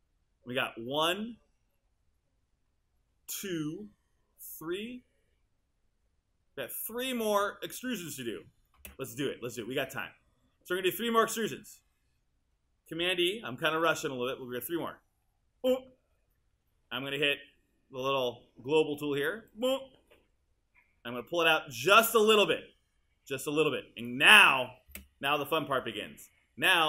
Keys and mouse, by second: 8.8 space, 15.6 super+e, 24.9 space.